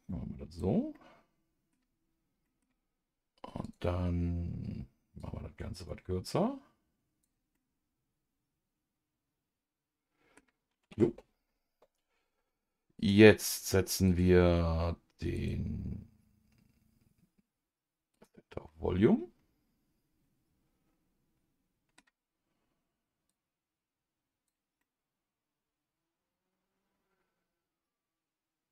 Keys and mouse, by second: 0.9 middle click, 2.4 middle click, 3.6 click, 5.2 click, 5.9-7.3 drag, 7.5-10.4 middle drag, 11.0 Tab, 13.0-18.2 drag, 18.6-22.0 middle drag, 23.3 click, 23.4-24.8 drag, 24.8-28.7 middle drag.